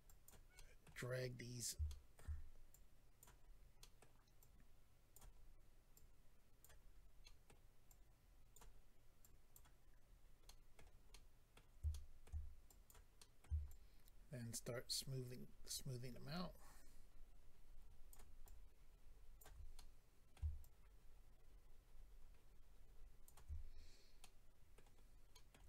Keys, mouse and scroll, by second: 0.1 click, 0.9 middle click, 1.4-1.9 scroll up 2, 1.9 shift+middle click, 2.7 click, 3.4 scroll down 1, 3.8 middle click, 4.4 click, 5.4-5.9 scroll up 2, 5.9 click, 6.6 scroll up 1, 6.9-7.2 scroll down 2, 7.2 middle click, 8.7 middle click, 9.2 click, 10.1-10.4 scroll up 2, 10.4 middle click, 11.1 middle click, 11.9 shift+middle click, 12.6 middle click, 12.6 click, 13.2 middle click, 14.8 shift+click, 18.4 shift+click, 19.7 middle click, 20.6 shift+click, 24.2 middle click, 25.0-25.3 scroll down 2, 25.3 middle click.